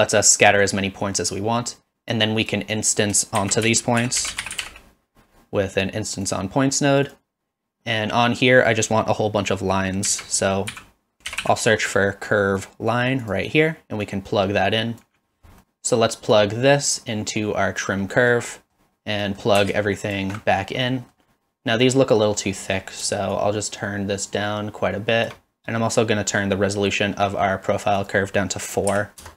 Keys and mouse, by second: 2.1 click, 2.7 click, 3.4 shift+a, 10.1 shift+a, 14.1-15.0 drag, 16.4-17.8 drag, 18.2 middle click, 18.7 middle click, 19.2 middle click, 20.1 alt+shift+click, 20.8 middle drag, 21.9 middle click, 22.7 middle click, 23.4-25.3 shift+drag, 28.2-29.3 drag.